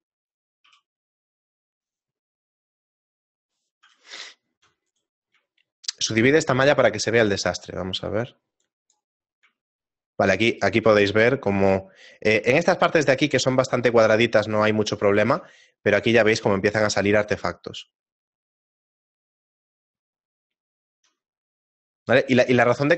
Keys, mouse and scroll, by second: 0.2 right click, 0.6 q, 4.3 shift+middle click, 4.9 right click, 5.6 shift+middle click, 7.3 click, 9.6 shift+middle click, 16.6 shift+middle click, 16.6-17.2 scroll up 2, 22.3 shift+middle click.